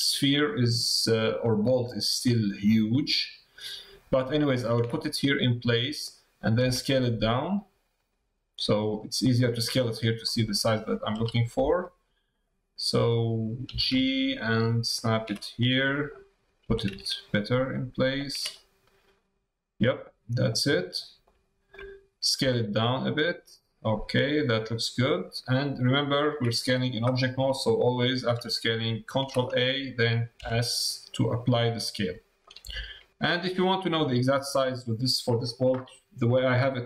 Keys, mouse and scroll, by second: 5.0 middle click, 5.7 middle click, 10.2 middle click, 12.4 middle click, 15.5 middle click, 18.5-20.4 drag, 21.0 click, 21.4 shift+click, 24.5 click, 32.4 middle click, 33.7 middle click.